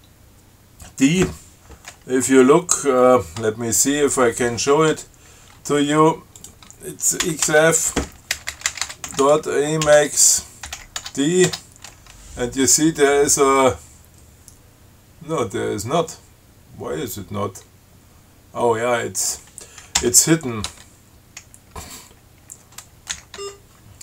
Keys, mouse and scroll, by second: 6.6 click, 7.5 ctrl+x, 7.7 ctrl+f, 8.6-11.5 typing, 10.2 Tab, 20.2 ., 20.9 Tab, 23.4 i, 23.6 Tab.